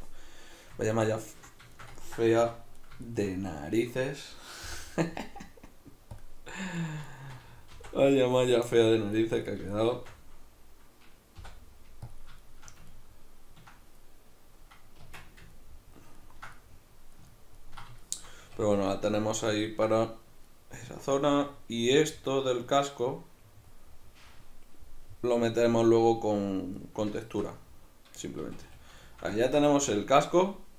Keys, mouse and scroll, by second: 2.4 1, 2.8 right click, 3.1 shift+right drag, 4.7 m, 6.8 right click, 7.1 shift+right click, 7.7 shift+r, 8.3 right click, 9.5 right click, 9.7 shift+right click, 9.9 shift+r, 11.4 m, 12.5-30.7 shift+middle drag, 15.1 Tab, 18.5 a, 28.5 a.